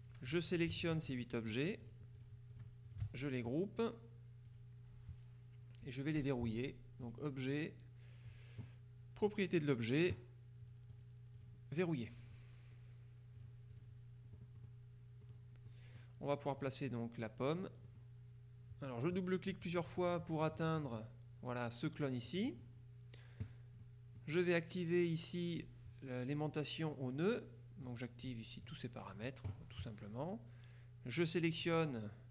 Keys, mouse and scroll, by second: 0.3 KP_Subtract, 0.6-3.5 shift+drag, 4.6 click, 7.1 click, 9.3 click, 11.0 click, 12.2 click, 13.5 click, 14.7 click, 15.3 click, 16.7 click, 18.0 middle click, 19.6-21.6 drag, 22.4 click, 22.4 right click, 23.9 middle click, 24.1 click, 27.9-29.7 drag, 31.7 click.